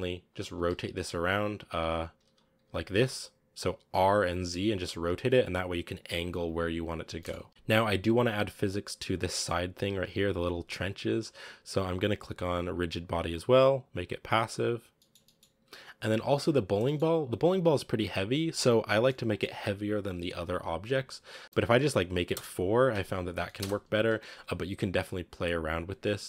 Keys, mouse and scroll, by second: 0.1 right click, 0.6 z, 1.8 z, 2.2 z, 2.5 r, 3.8 r, 7.1-7.4 middle drag, 7.4 a, 7.5-9.0 middle drag, 9.0 right click, 9.2-9.8 middle drag, 9.8-12.7 scroll up 1, 12.7-14.8 drag, 14.8-15.4 shift+middle drag, 15.4 a, 15.6-16.2 scroll down 1, 16.2 right click, 16.7 shift+middle drag, 17.0 scroll up 1, 18.9-19.8 middle drag, 19.8-20.6 scroll down 1, 20.6-21.0 scroll up 1, 21.4 click, 22.2-23.3 drag, 23.3 middle click, 23.5 space, 24.0 a.